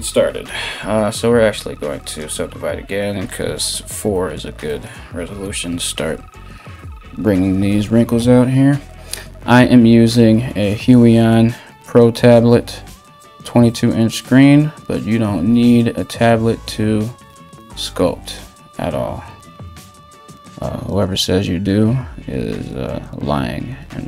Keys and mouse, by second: 2.1-24.0 drag, 5.6 ].